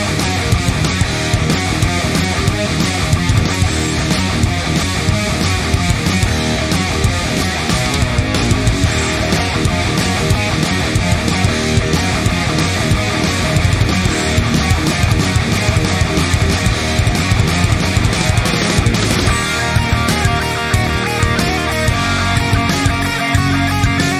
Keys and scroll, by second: 14.4 ctrl+j.